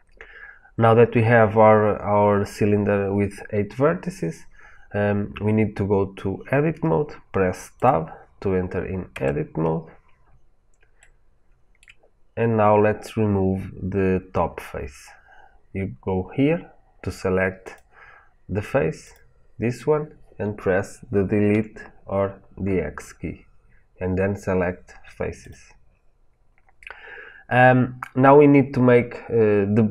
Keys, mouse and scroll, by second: 1.2-2.1 scroll up 1, 2.1-5.0 scroll up 1, 9.0 Tab, 10.1-10.9 scroll up 1, 10.9-17.5 shift+middle drag, 17.5 click, 18.9 click, 21.4 Delete.